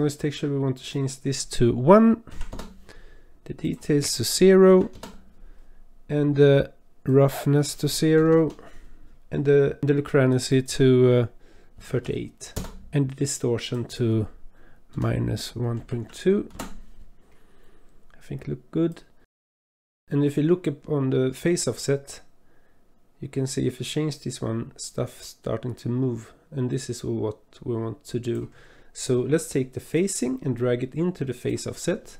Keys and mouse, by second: 0.7-2.5 drag, 3.6-4.9 drag, 7.1-8.4 drag, 10.5-12.6 drag, 13.6-16.6 drag, 18.9 click, 19.7 click, 21.8-28.3 drag, 30.0-31.6 drag.